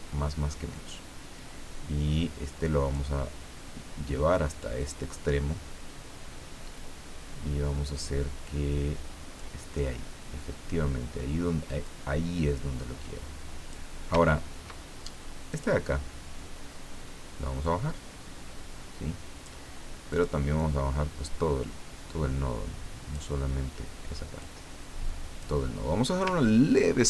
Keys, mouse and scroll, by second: 0.9-3.1 drag, 4.6-9.6 drag, 11.8-13.9 drag, 14.2-14.6 ctrl+scroll up 2, 15.5 click, 17.6-19.7 drag, 20.1 click, 20.6-23.2 drag, 24.4-25.7 drag, 26.4-26.8 ctrl+scroll down 2.